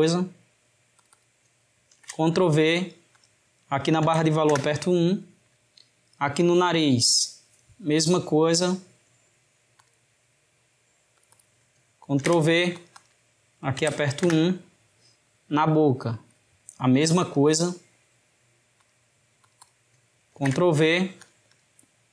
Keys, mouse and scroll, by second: 0.1 middle click, 1.0 click, 1.1-3.0 drag, 3.3-6.3 drag, 6.8 click, 8.4-10.2 drag, 10.2-11.3 middle drag, 11.3 click, 11.4-12.9 drag, 13.1-15.7 drag, 17.3-17.8 drag, 17.8-18.9 middle drag, 18.9-19.5 drag, 19.6-21.3 drag, 21.6-22.1 drag.